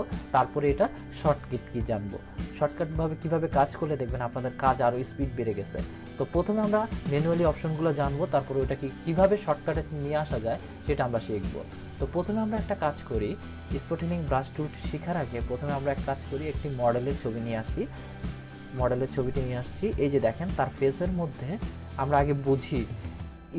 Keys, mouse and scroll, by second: 12.7 click, 16.3 click, 16.4 click.